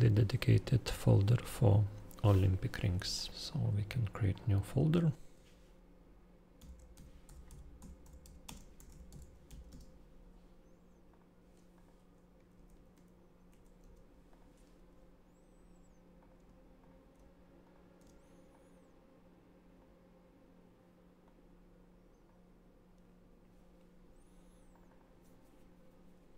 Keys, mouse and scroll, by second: 3.1 click, 3.4 click, 4.2 click, 5.3-6.5 shift+Delete, 6.3-9.9 typing, 9.6 click, 10.3 click, 11.0 click, 11.7 click, 12.1-13.7 typing, 14.2 click, 16.1 click, 16.4 ctrl+i, 16.7 ctrl+click, 16.9 ctrl+i, 17.7 ctrl+shift+i, 18.5 click, 21.2 click, 24.8 click.